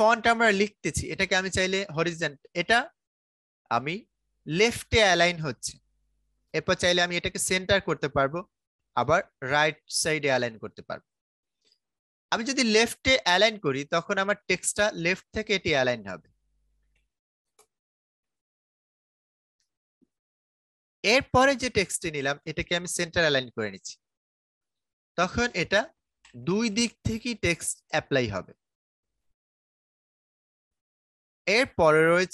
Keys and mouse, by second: 0.3 click, 6.6 click, 12.3 click, 15.4-18.6 typing, 19.9 click, 25.2-28.7 typing, 30.6 click.